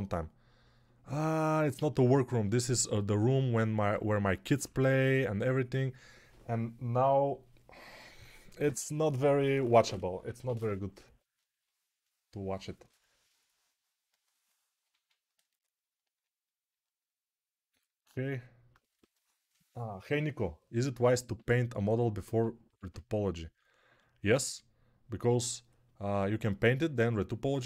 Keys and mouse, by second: 0.0-16.1 alt+drag, 0.0-16.1 alt+middle drag, 0.0-16.1 alt+right drag, 4.5 6.